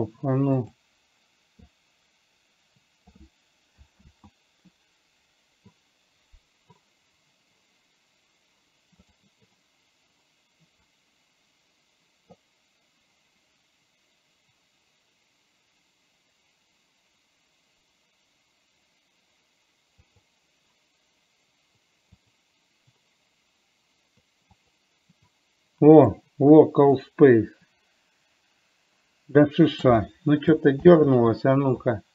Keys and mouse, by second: 1.0 click, 2.0-3.5 drag, 4.4 ctrl+z, 9.4 click, 26.4 click, 27.4-30.4 drag, 31.2 ctrl+z.